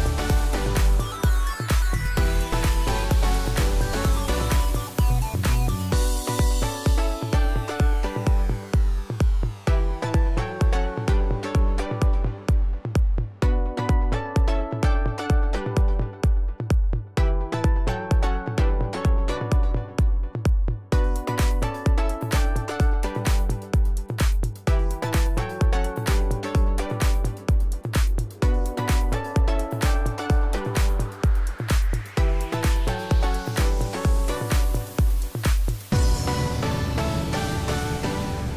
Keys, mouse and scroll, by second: 0.8 typing, 5.1 click, 34.8 click.